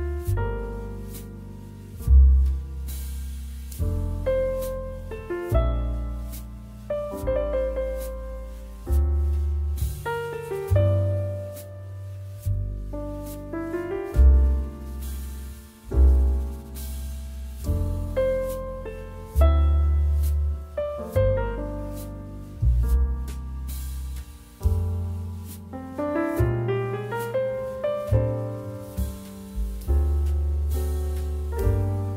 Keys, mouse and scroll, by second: 0.0-3.4 typing, 4.8-8.0 typing, 8.9 ctrl+s, 14.6 ctrl+z, 16.1 space, 17.3 ctrl+z, 18.0 ctrl+z, 18.6 space, 19.3 space, 19.8 space, 20.4 ctrl+z, 21.0-24.5 typing, 21.7 ctrl+z, 27.0 space, 29.4 space, 29.8 space, 30.1 space, 30.2 ctrl+z, 30.6 space.